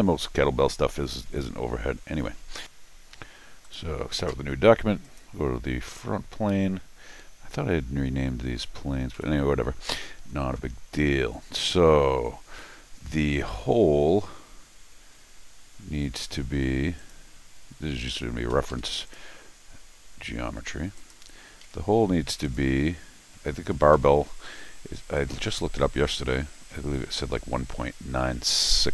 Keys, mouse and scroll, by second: 3.6 click, 5.0 click, 9.1 c, 17.0 click, 18.1 click, 18.5 Escape, 18.7 Escape, 19.1 click, 21.0 click, 21.6 d, 22.4 click, 25.2 click.